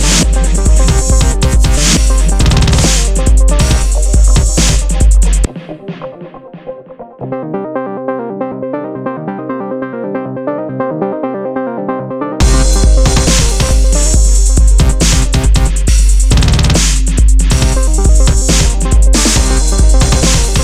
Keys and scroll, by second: 0.9 super+z, 1.9 super+-, 5.4 alt+super+z, 14.6 super+-.